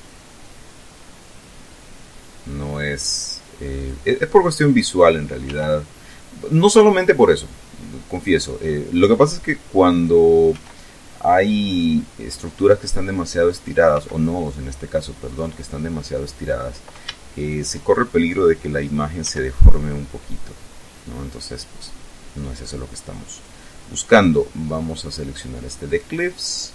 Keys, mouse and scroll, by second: 3.8 click, 4.9 right click, 5.5 g, 8.2 click, 10.0 right click, 10.6 g, 12.5 click, 13.6 right click, 14.0 g, 15.4 click, 16.2 right click, 17.4 shift+right click, 19.2 g, 21.5 click, 23.4 click, 25.9 click.